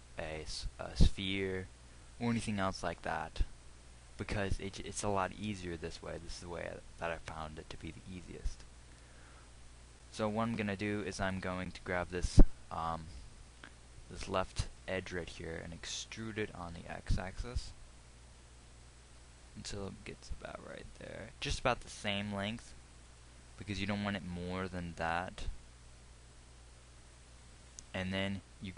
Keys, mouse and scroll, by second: 11.6-16.5 drag, 16.5 e.